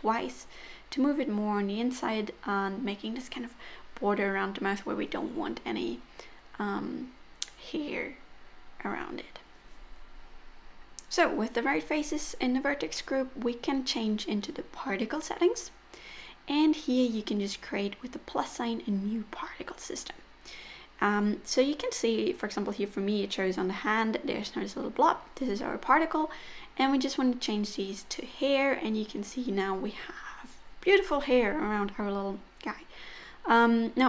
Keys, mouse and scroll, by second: 0.2 click, 0.4 g, 3.1 click, 3.3 g, 5.6 click, 5.9-6.3 scroll down 4, 6.5 middle click, 7.6-8.3 scroll down 3, 7.9 click, 8.3 middle click, 9.1 middle click, 10.9 Tab, 11.6 middle click, 15.7 click, 17.5 click, 20.4 middle click, 25.2 click, 26.1-27.0 scroll down 5, 26.8 middle click, 29.5-29.8 scroll up 3, 30.2 middle click.